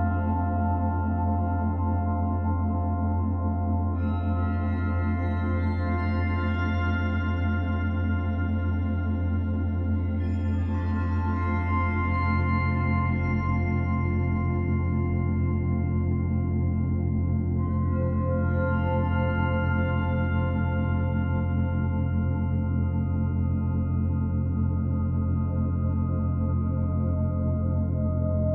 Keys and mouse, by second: 2.2 click, 3.1 click, 6.4 Left, 8.1 click, 9.5 click, 10.4 shift+d, 10.4 shift+d, 11.1 click, 11.7-13.2 drag, 14.3 click, 14.5 click, 15.1 click, 16.5-19.0 drag, 20.1 click, 21.0 shift+d, 22.4-24.0 drag, 23.5 Left, 25.4-26.9 shift+drag.